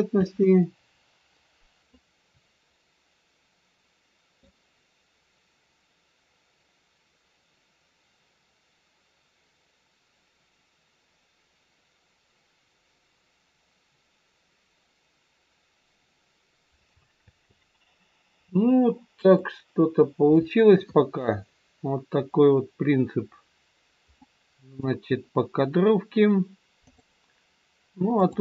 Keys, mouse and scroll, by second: 0.1 space.